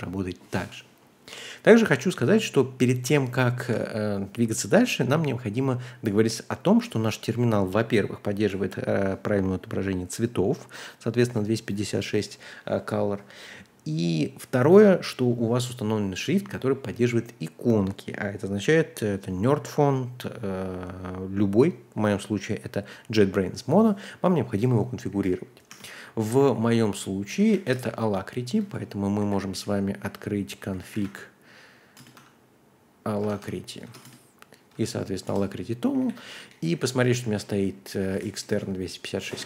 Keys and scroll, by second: 2.9-3.6 typing, 25.2-33.7 typing, 33.8 shift+Tab, 34.0 Return, 34.7-39.4 typing.